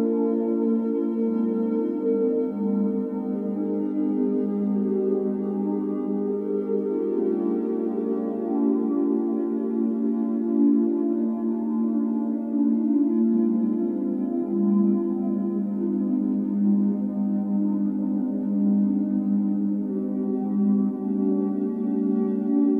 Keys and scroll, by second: 3.9 Escape, 4.0 x, 7.9 typing, 9.8-11.0 typing, 11.9 Escape, 16.8 Escape, 17.0 Escape.